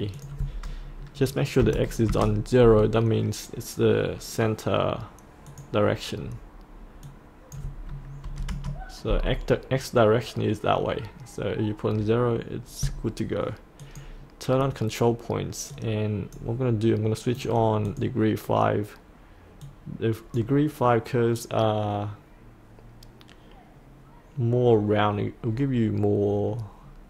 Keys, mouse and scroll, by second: 1.6 KP_0, 5.5 click, 8.2 KP_0, 13.8-20.7 drag.